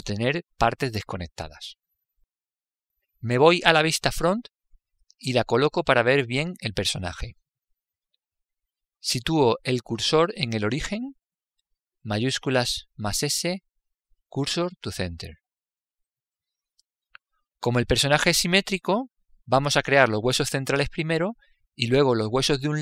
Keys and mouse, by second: 4.7 KP_1, 12.6 shift+s, 16.4-20.2 middle drag, 20.2 click.